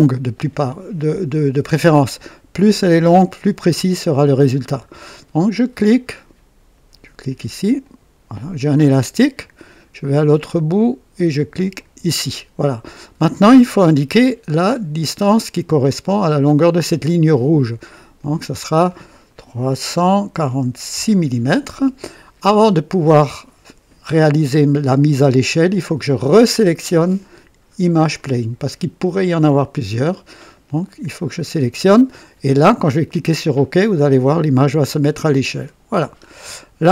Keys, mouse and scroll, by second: 7.8 click, 11.7 click, 18.1 click, 19.9 KP_3, 20.3 KP_4, 20.9 KP_6, 28.1 click, 34.8 click, 36.1-36.5 scroll up 1.